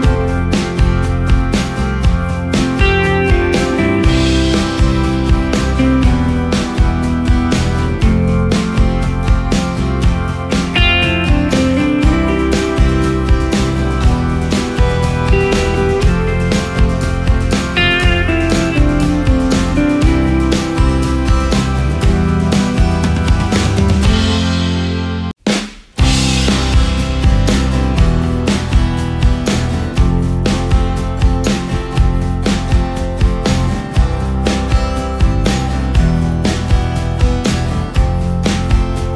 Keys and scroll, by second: 3.0 Delete, 4.8 ctrl+space, 9.3 ctrl+space, 12.1 Delete, 13.3 space, 16.2 Delete, 16.9 Delete, 17.9 Delete, 20.4 Delete, 20.8 Delete, 21.1 Delete, 22.2 Delete, 22.9 Delete, 23.7 Delete, 25.2 Delete, 38.4 space.